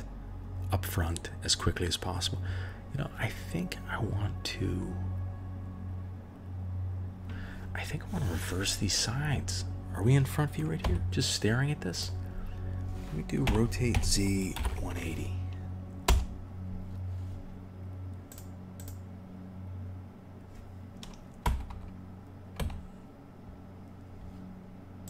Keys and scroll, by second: 10.8 KP_1, 13.4 r, 21.4 KP_1, 21.6 KP_3, 22.5 KP_1.